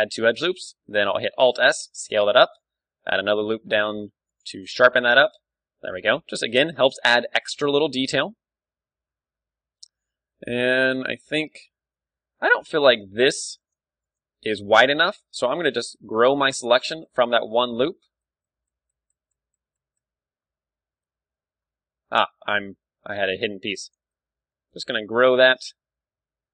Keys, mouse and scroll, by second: 1.0-2.6 drag, 1.2 Tab, 1.9 Tab, 2.3 ctrl+r, 2.8 middle click, 4.5 Tab, 4.5-6.2 drag, 6.2 middle click, 6.8 KP_1, 7.3 ctrl+w, 8.5 Tab, 8.9 Tab, 9.1-13.5 middle drag, 12.2 Tab, 12.2 z, 12.6 a, 13.3 b, 14.5-15.9 right drag, 14.5 z, 15.9 ctrl+KP_Add, 16.1 ctrl+KP_Add, 16.3 ctrl+KP_Add, 16.4 ctrl+KP_Add, 16.7 ctrl+KP_Add, 16.8 ctrl+KP_Add, 17.1 ctrl+KP_Add, 17.3 ctrl+KP_Add, 17.6 ctrl+KP_Add, 17.7 ctrl+KP_Add, 18.2 ctrl+KP_Add, 18.5 ctrl+KP_Add, 18.8 ctrl+KP_Add, 18.9 ctrl+KP_Add, 19.1 ctrl+KP_Add, 19.3 ctrl+KP_Add, 19.5 ctrl+KP_Add, 19.8 ctrl+KP_Add, 20.1 ctrl+KP_Add, 21.0-22.1 middle drag, 22.3 alt+h, 22.7 middle click, 22.7 a, 22.8 KP_1, 23.9-25.6 right drag, 24.4 ctrl+KP_Add, 24.5 ctrl+KP_Add, 24.7 ctrl+KP_Add, 25.0 ctrl+KP_Add, 25.2 ctrl+KP_Add, 25.4 ctrl+KP_Add, 25.6 ctrl+KP_Add, 25.8 ctrl+KP_Add, 26.0 ctrl+KP_Add, 26.3 ctrl+KP_Add, 26.4 ctrl+KP_Add.